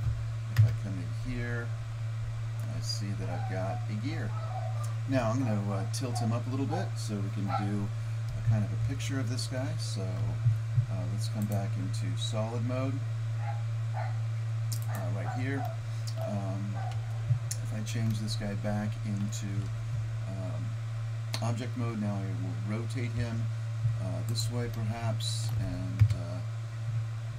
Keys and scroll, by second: 0.7 KP_0, 17.0 Tab, 23.2 r, 26.1 KP_0.